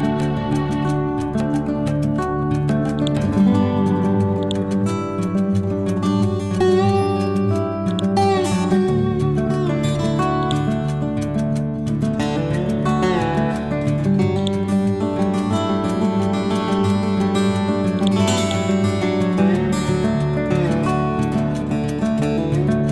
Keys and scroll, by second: 3.6 c, 14.9 Down, 15.4 Up, 17.2 alt+F7, 20.0 Right, 20.4 Up, 21.1 Left.